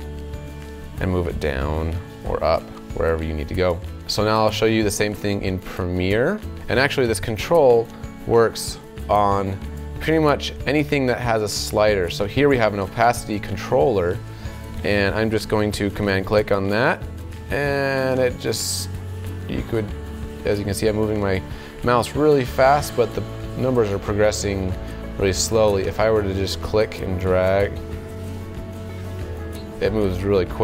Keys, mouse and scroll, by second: 16.2-30.6 super+drag.